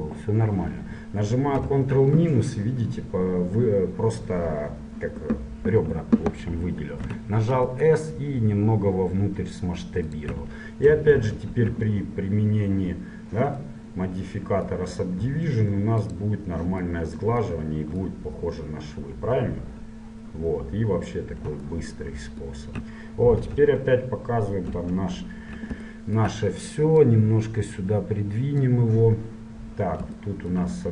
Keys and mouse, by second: 1.7 ctrl+KP_Subtract, 7.3 s, 11.3 ctrl+1, 11.8 Tab, 13.9 click, 16.2-18.2 drag, 18.4-20.2 middle drag, 22.0-23.6 middle drag, 23.6 KP_Divide, 24.8 KP_1, 26.3 middle click, 27.2-29.2 drag.